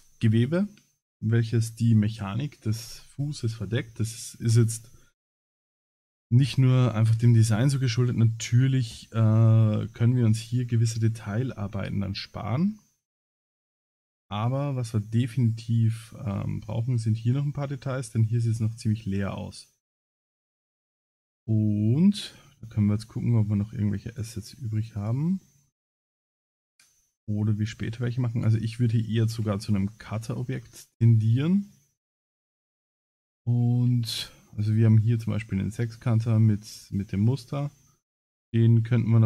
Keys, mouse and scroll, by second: 5.6-6.3 scroll down 9, 6.7 scroll down 2, 7.2 middle click, 12.8 shift+middle click, 13.6 scroll down 4, 14.0 middle click, 16.8 scroll up 3, 17.3-17.7 shift+middle drag, 18.8-19.3 shift+middle drag, 19.4 scroll down 4, 19.8 scroll up 4, 20.4 middle click, 21.2 scroll up 1, 22.4 scroll up 2, 22.8 scroll down 4, 24.1 click, 25.0 click, 27.6 click, 28.6 scroll up 2, 29.3 KP_Decimal, 30.0-30.9 scroll down 9, 32.2 click, 33.0 middle click, 34.1 shift+middle click, 36.6-37.7 scroll down 9, 37.6-38.2 scroll up 3, 38.0 middle click.